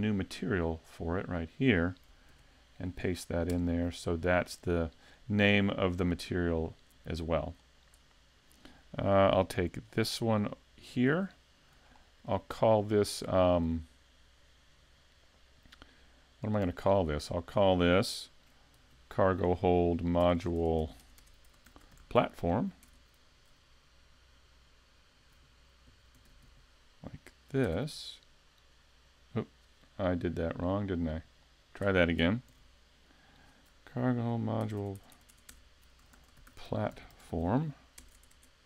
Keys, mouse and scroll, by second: 0.4 click, 1.4 click, 6.1 click, 9.9 click, 11.0 right click, 11.9 shift+middle click, 12.4-13.1 scroll up 3, 13.4 shift+middle click, 17.4 click, 20.4 BackSpace, 20.8 BackSpace, 21.2 BackSpace, 34.8 BackSpace, 35.0 BackSpace, 35.3 BackSpace, 38.2 BackSpace, 38.3 BackSpace.